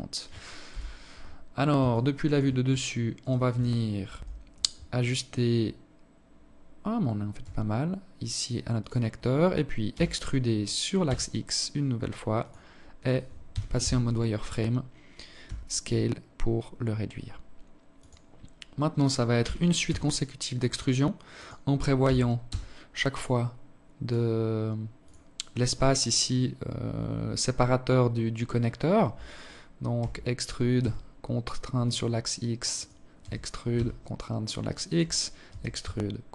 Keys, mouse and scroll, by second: 0.7 alt+click, 2.0 alt+right click, 2.9 KP_7, 6.2 s, 8.7 e, 12.3 z, 14.3 s, 18.2 e, 20.8 e, 28.8 e, 32.0 e, 34.3 e.